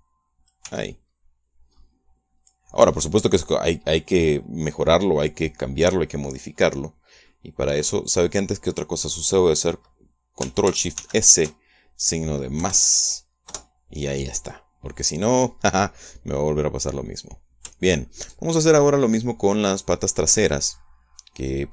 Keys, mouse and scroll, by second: 0.6 click, 1.5 Tab, 2.1-2.6 scroll down 1, 2.6 scroll up 1, 3.7 middle click, 8.1-9.2 middle drag, 11.8 ctrl+shift+s, 13.5 KP_Add, 14.3 KP_Enter, 18.7 shift+middle click, 19.3-21.7 shift+middle drag.